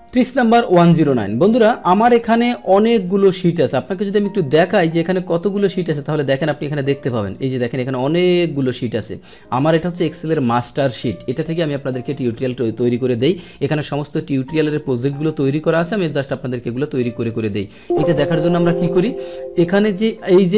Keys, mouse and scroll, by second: 0.0 Tab, 0.0 click, 4.9 right click, 5.9-7.3 middle drag, 7.3-17.4 drag, 17.7 click, 19.0 click.